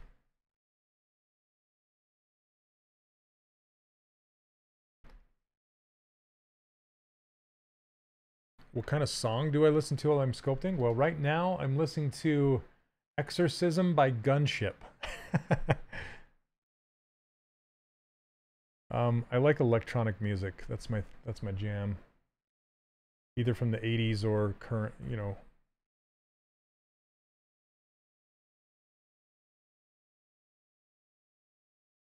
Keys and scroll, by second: 3.3 s, 18.2 s, 21.1 ctrl+z.